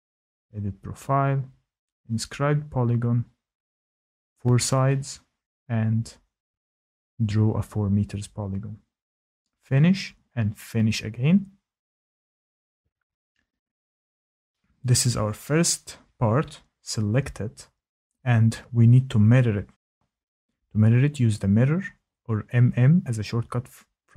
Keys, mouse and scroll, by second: 1.6 click, 4.0 click, 6.2 click, 7.3 typing, 8.0 Return, 10.0 click, 11.7 click, 13.8 click, 15.7 click, 22.9 click.